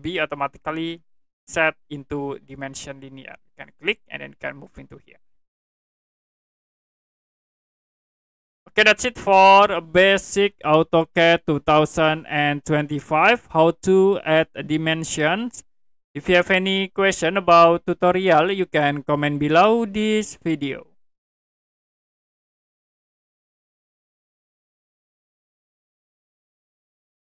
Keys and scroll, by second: 7.9 Escape, 22.4 Print.